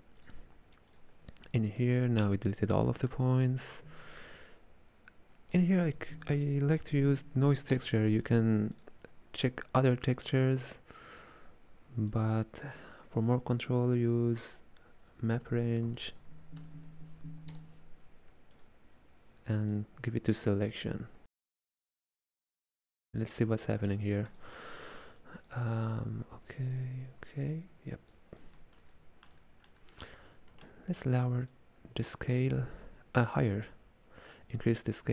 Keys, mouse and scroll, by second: 1.7-5.6 middle drag, 5.6 space, 10.4 click, 12.2 click, 19.8 click, 21.6-24.4 middle drag, 24.4 ctrl+shift+click, 25.3 click, 28.6-31.6 ctrl+middle drag, 31.6-34.7 drag.